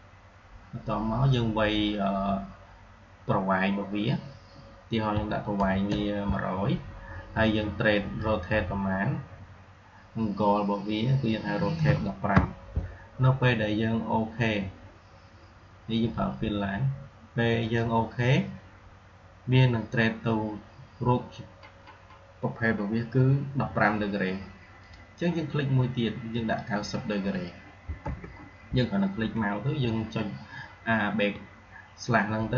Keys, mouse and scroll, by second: 7.9 click, 17.5 click, 24.7 click.